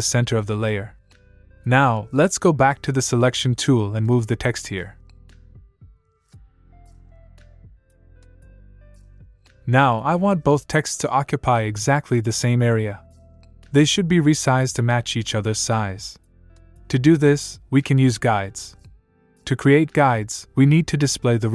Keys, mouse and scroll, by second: 2.6 click, 4.8 click.